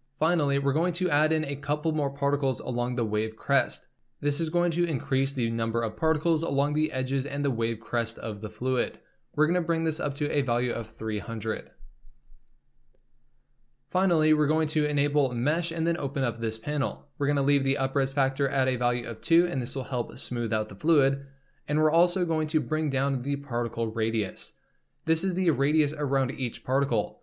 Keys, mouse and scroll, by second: 0.0 scroll down 10, 3.9-6.4 scroll up 1, 8.8-10.4 drag, 10.4 KP_0, 13.2-15.3 scroll down 4, 15.7-16.3 drag, 16.3-17.6 scroll down 4.